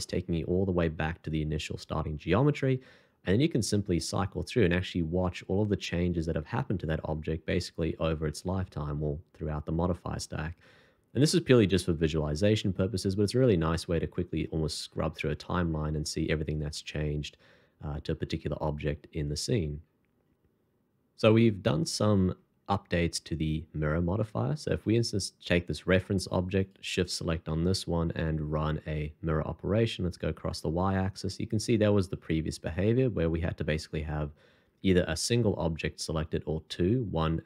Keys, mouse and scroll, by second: 3.3-3.7 scroll up 1, 12.9 scroll down 1, 14.5 scroll up 1, 16.4 scroll down 1, 18.1-19.0 scroll up 1, 26.6 shift+click, 27.5 shift+2, 29.9 r.